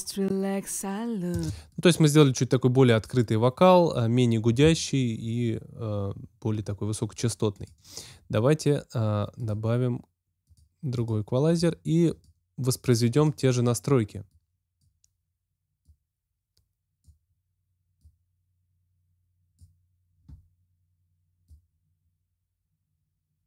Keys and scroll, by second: 1.3 space.